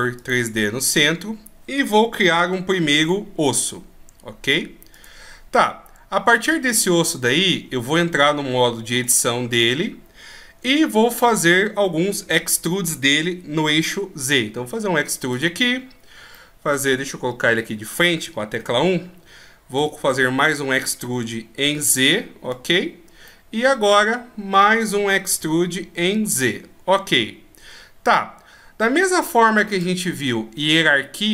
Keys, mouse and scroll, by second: 2.9 shift+a, 5.7 middle click, 6.5-7.3 scroll up 6, 7.3-8.8 scroll up 1, 8.9 Tab, 9.5 right click, 10.1 scroll down 1, 10.6-12.1 shift+scroll up 1, 12.3 e, 16.0 scroll down 1, 16.3 middle click, 17.4 KP_1, 18.2 middle click, 18.8-19.6 scroll up 2, 19.6 scroll up 1, 19.8 e, 22.9-23.2 scroll down 1, 23.2 middle click, 24.3-25.3 scroll down 1, 25.3 e.